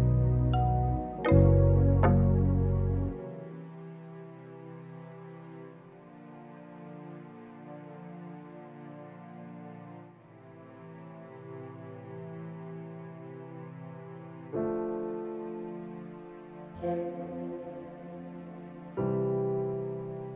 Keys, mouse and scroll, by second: 0.5 drag, 1.5 click, 2.1 Delete, 2.5-4.2 middle drag, 4.5 middle click, 5.7 KP_1, 6.3-6.8 shift+middle drag, 7.9 drag, 9.0 g, 9.0 z, 10.0 click, 10.4 middle drag, 11.6 shift+a, 13.2 s, 13.4 KP_5, 13.5 KP_0, 13.8 KP_Enter, 14.3-14.9 middle drag, 15.1 KP_1, 15.6 click, 17.6-18.0 middle drag, 18.1 click, 18.4 s, 19.1 click, 19.2 middle click, 19.8 Tab.